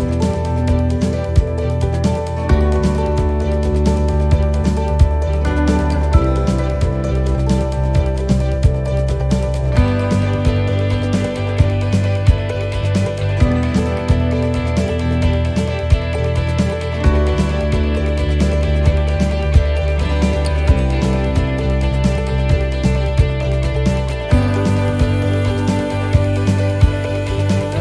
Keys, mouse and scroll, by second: 1.4 click, 4.7 click, 4.7 middle click, 6.0 middle click, 6.3 shift+middle click, 6.6 shift+middle click, 6.6-7.0 scroll up 4, 7.0 middle click, 7.3-8.3 scroll down 3, 7.7 middle click, 8.4 middle click, 8.7-9.1 scroll down 1, 9.3 shift+middle click, 10.7 click, 15.8 click, 15.8 shift+d, 18.7 middle click, 19.2 shift+middle click, 19.6-20.1 scroll up 3, 20.1 middle click, 21.1 right click, 22.0 shift+right click, 23.4 click, 24.7 middle click, 26.4 click, 27.5 middle click.